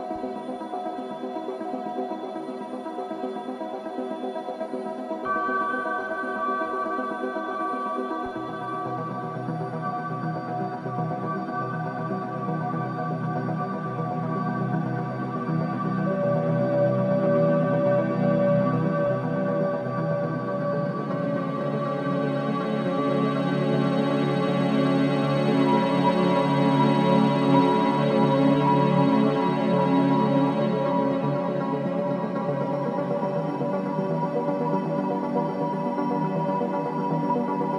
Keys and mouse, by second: 0.0 Tab, 1.0 ctrl+a, 1.6-4.1 typing, 6.4-9.4 typing, 10.7 shift+click, 11.4-12.1 typing, 14.0-14.4 typing, 15.3-16.0 drag, 16.2 click, 17.2-18.7 typing, 19.5 shift+click, 22.8 shift+click, 23.4-24.2 shift+drag, 24.0-24.8 typing, 25.9 click, 26.6-27.0 typing, 28.3-29.9 drag, 30.2-31.3 shift+drag, 31.6 typing, 33.0-35.4 drag.